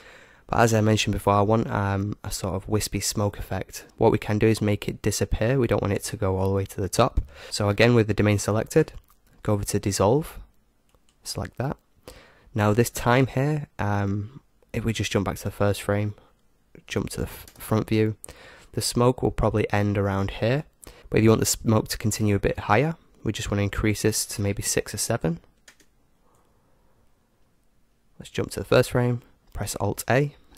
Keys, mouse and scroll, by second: 3.8-7.4 middle drag, 10.8-12.8 drag, 13.8-14.9 middle drag, 14.9-16.9 drag, 15.8-17.4 middle drag, 17.4 KP_0, 24.1-26.5 drag, 27.0-28.7 middle drag, 28.7-30.5 drag, 29.8 alt+a.